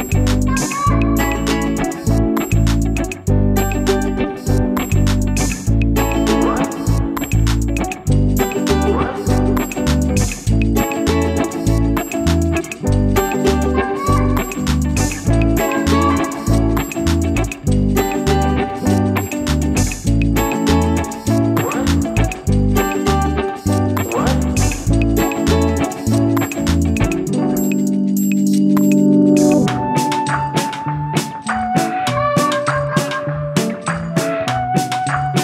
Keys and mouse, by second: 0.2 b, 1.6 click, 3.2 ], 11.4 click, 12.4 click, 13.4 click, 14.2 click, 21.2 i, 22.9 click, 24.7 click, 25.9 alt+BackSpace, 29.2 click, 30.0 Return, 30.3 v, 34.0 click.